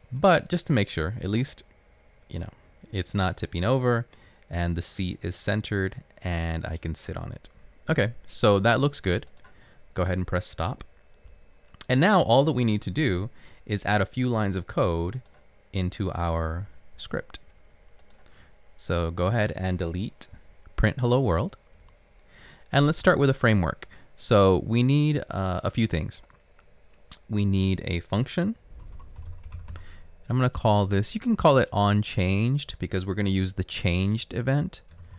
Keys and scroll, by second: 20.4 BackSpace, 20.9 BackSpace, 21.9 BackSpace, 28.7-30.5 typing, 32.3-33.0 typing.